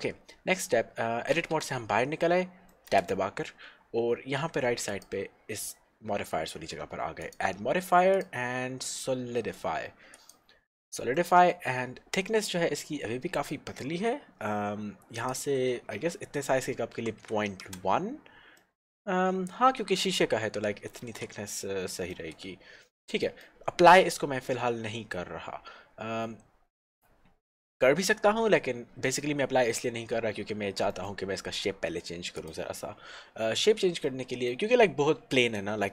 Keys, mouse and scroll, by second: 0.1-1.3 scroll up 1, 1.5 Tab, 2.8 middle click, 4.9 click, 8.1 click, 11.9-12.2 scroll up 1, 12.4 middle click, 15.3 click, 17.2 KP_1, 17.7 Return, 18.8 middle click, 21.7 shift+middle click, 23.3 middle click, 23.6 middle click, 25.2-28.2 scroll down 1, 31.1 middle click, 32.4 click, 34.3 middle click.